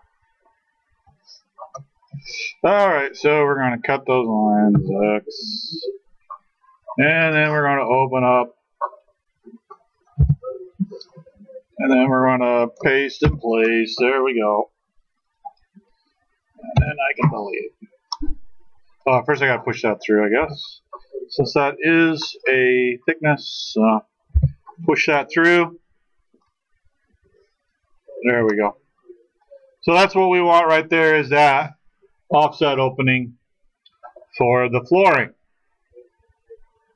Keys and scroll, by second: 4.7 ctrl+x, 10.2 ctrl+h, 16.8 Delete, 20.4 ctrl+z, 24.3 p.